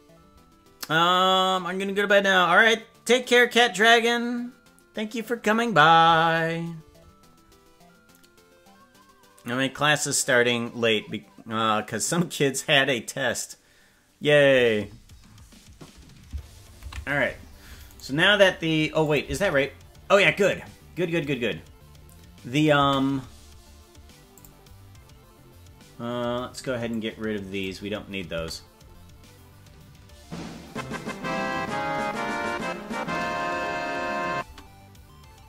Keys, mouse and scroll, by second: 18.0 right click, 19.0 click, 19.2 space, 21.0 scroll down 4, 23.0 space, 24.4 click, 26.9 click, 28.4 space, 34.6 space.